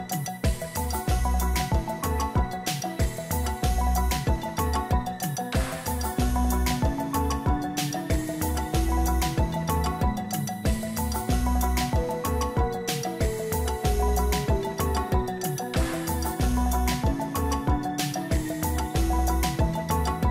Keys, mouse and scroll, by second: 11.6-13.6 scroll down 4, 18.1 click, 18.6 click.